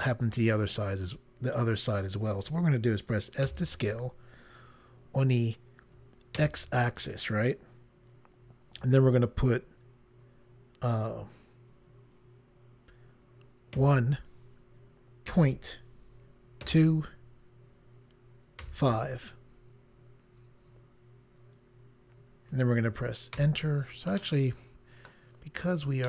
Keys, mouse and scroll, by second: 3.5 s, 6.4 x, 13.8 1, 15.4 ., 16.7 2, 18.7 5, 23.5 Return, 24.3 middle click.